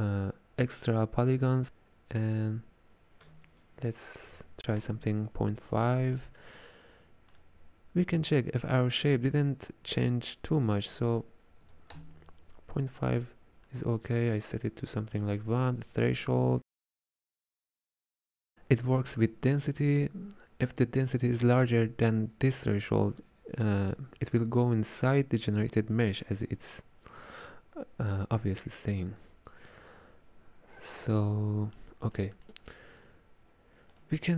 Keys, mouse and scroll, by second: 3.3-6.3 drag, 6.4-8.2 ctrl+middle drag, 8.2-13.9 drag, 14.1-17.1 drag, 31.8-34.3 middle drag.